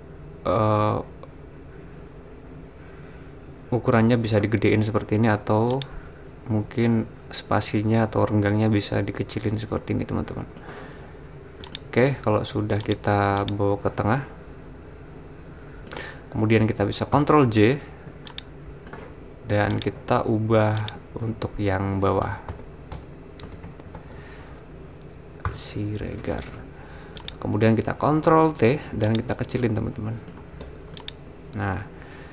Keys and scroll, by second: 17.1 super+j, 21.4 super+a, 21.8-25.4 typing, 28.1 super+t, 30.6 Return.